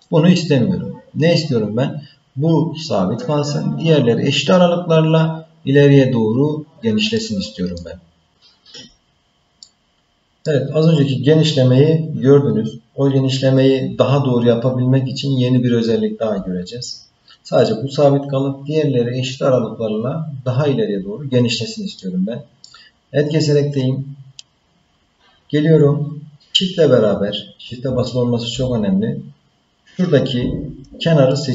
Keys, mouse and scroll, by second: 7.1 middle click, 8.0 scroll down 4, 9.6 middle click, 22.0 middle click, 31.2 shift+click.